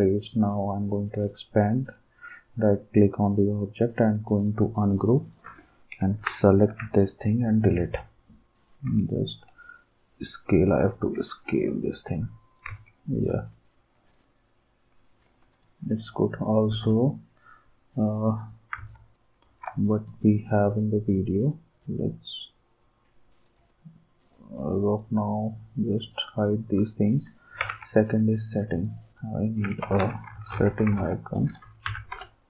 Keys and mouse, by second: 0.2 click, 4.4 click, 5.4 click, 16.7 alt+Tab, 18.7 alt+Tab, 27.6 alt+Tab, 28.8 click, 29.6-31.5 typing, 31.9 Down, 32.2 Return.